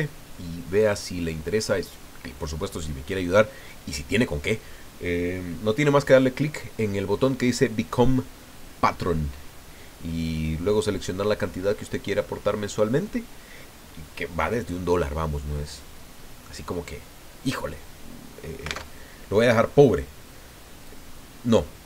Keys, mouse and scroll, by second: 18.8 alt+Tab, 19.5-20.4 scroll down 4, 20.8-21.8 drag.